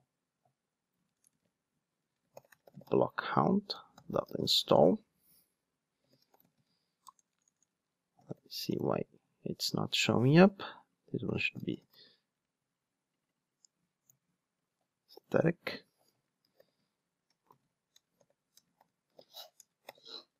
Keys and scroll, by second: 16.1 super+z.